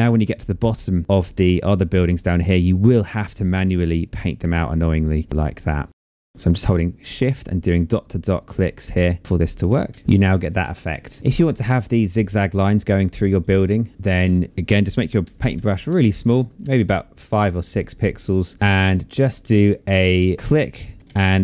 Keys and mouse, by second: 6.0 shift+click, 6.2 shift+click, 7.8 click, 8.4 shift+click, 9.6 shift+click, 11.2 click, 13.7 click, 20.3 ctrl+z, 21.3 shift+click.